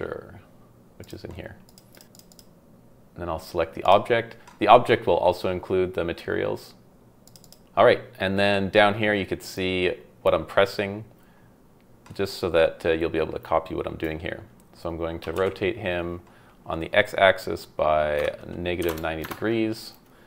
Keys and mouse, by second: 15.2 r, 15.3 x, 18.2 KP_Subtract, 18.8 KP_9, 18.9 KP_0, 19.2 KP_Enter.